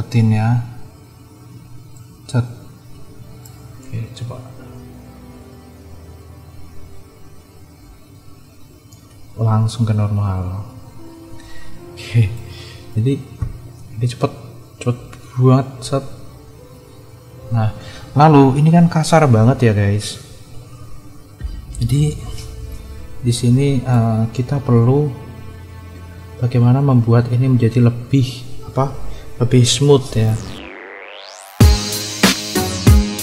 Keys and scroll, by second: 4.1 space, 11.3 space, 17.4 space, 23.2 =.